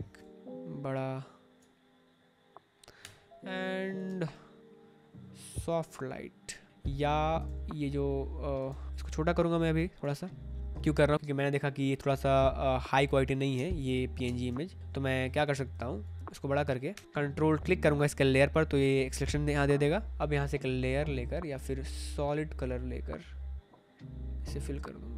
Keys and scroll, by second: 0.1 ctrl+t, 2.9 Return, 3.9 space, 6.7 ctrl+z, 8.6 ctrl+z, 10.7 Return, 11.2 space, 13.5 v, 14.2 space, 15.6 ctrl+t, 16.8 Return.